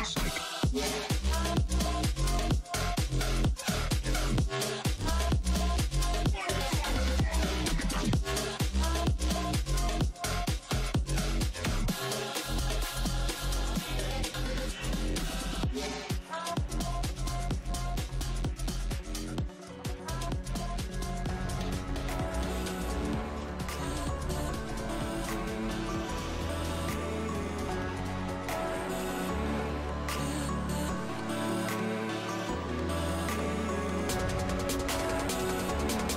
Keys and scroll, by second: 12.5 f, 15.4 BackSpace, 16.1 d, 16.6 e, 18.4 b, 19.1 f, 20.6 3, 21.8 d.